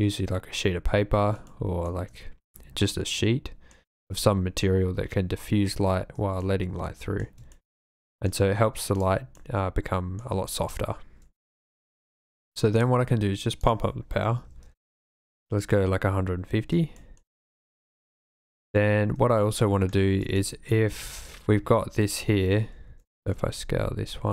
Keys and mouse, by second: 1.4-1.9 shift+middle drag, 2.5-3.7 drag, 6.6-7.2 drag, 7.7 shift+middle click, 8.2 click, 8.9 click, 9.4 click, 12.8 click, 13.7-14.9 drag, 17.0 shift+middle click, 17.4 middle click, 19.1 KP_3, 20.6 shift+middle click, 21.5-23.7 typing.